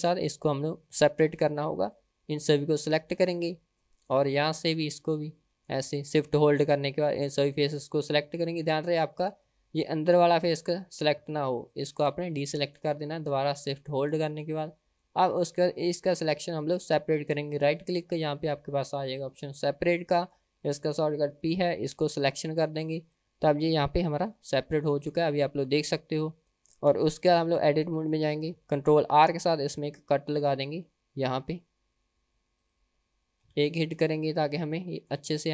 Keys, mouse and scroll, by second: 2.0 click, 3.4-4.6 middle drag, 4.6 shift+click, 5.2 middle click, 6.0 shift+click, 7.0-8.1 middle drag, 8.3-8.8 scroll up 3, 8.8 middle click, 10.1 shift+click, 10.6 middle click, 11.7 shift+click, 12.4 middle click, 13.0-13.4 scroll down 2, 13.4-14.5 middle drag, 14.7-15.1 scroll down 1, 15.1 middle click, 16.0-16.5 scroll up 1, 17.7-22.4 right drag, 23.4 Tab, 24.2 g, 27.4 Tab, 27.8 middle click, 29.6 ctrl+r, 33.6 KP_1, 34.2-34.6 scroll up 3, 34.8 shift+middle click, 35.3-35.5 scroll down 2.